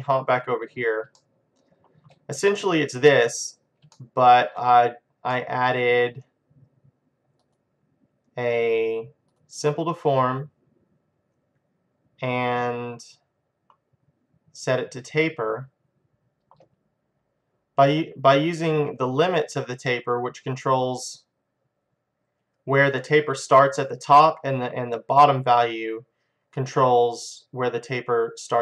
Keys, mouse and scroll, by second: 0.4-2.3 drag, 1.2-3.1 middle drag, 3.1-4.3 drag, 4.0 middle click, 4.3-7.1 middle drag, 4.4 click, 7.5-9.4 drag, 12.8-14.6 scroll up 1, 14.6-16.0 scroll up 1, 16.0-18.6 middle drag, 18.7-21.6 drag, 23.1-28.1 middle drag, 28.1-28.6 drag.